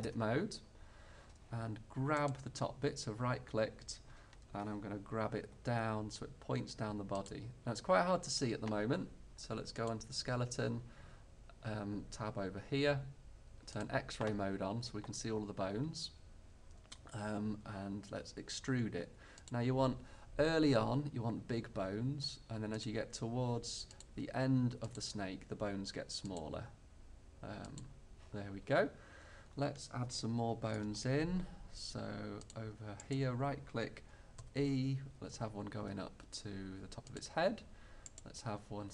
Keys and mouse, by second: 0.1 Tab, 2.3-3.4 drag, 3.5 click, 3.9 click, 5.5 g, 8.8 click, 9.8-11.8 drag, 13.8-15.8 drag, 18.2 e, 19.6-21.6 drag, 21.9 e, 22.9-24.2 drag, 23.0 e, 24.2 e, 25.2 e, 26.6 e, 29.5 middle click, 32.5-34.4 middle drag, 34.4 click, 34.5 e, 37.3 click.